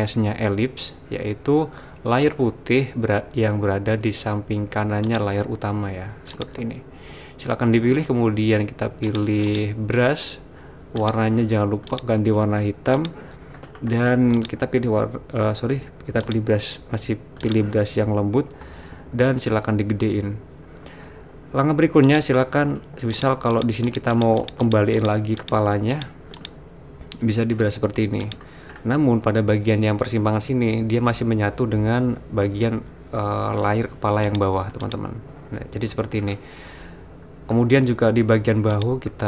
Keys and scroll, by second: 18.8-19.3 typing.